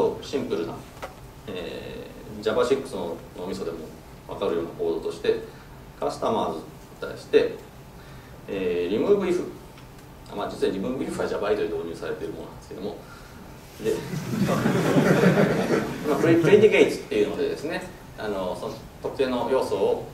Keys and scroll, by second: 6.5 Tab, 14.7 Tab.